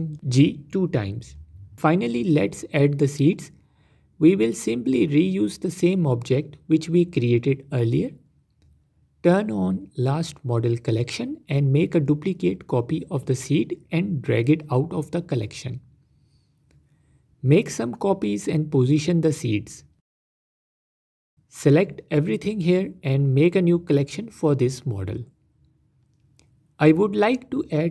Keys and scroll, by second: 0.3 g, 0.5 g, 0.6 Tab, 2.4 shift+a, 6.6 shift+d, 13.5 s, 19.1 alt+d, 20.1 alt+d, 20.9 alt+d, 21.3 s, 23.9 m.